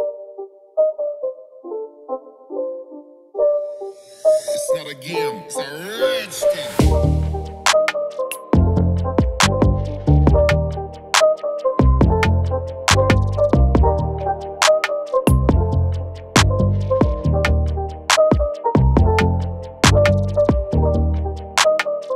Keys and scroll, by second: 4.6 ctrl+-, 5.0 ctrl+-, 17.9 ctrl+s, 22.0 ctrl++.